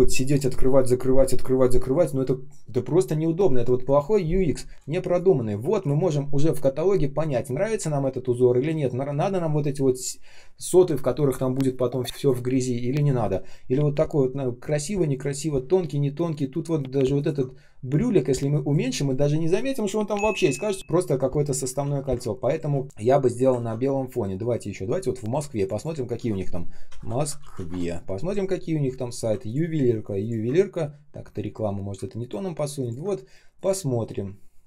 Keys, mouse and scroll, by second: 5.1 shift+click, 17.9 shift+click, 21.7 ctrl+я, 22.4 ctrl+click, 23.5 ctrl+ц, 27.6 Return, 27.6 typing, 29.4 ctrl+click, 30.1 ctrl+click, 32.1 ctrl+click, 32.7 ctrl+click.